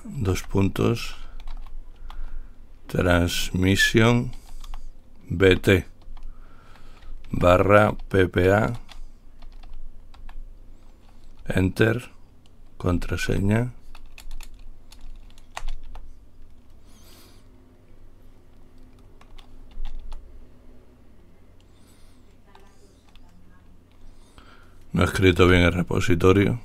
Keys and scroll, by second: 0.0-6.3 typing, 7.5-10.4 typing, 11.7 Return, 11.7 typing, 12.9-16.1 typing, 20.3 Return.